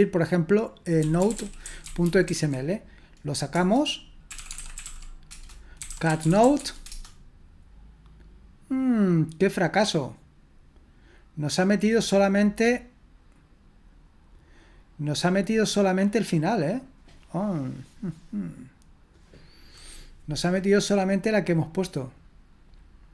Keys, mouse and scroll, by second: 1.0-2.7 typing, 3.5 Return, 4.1-6.9 typing.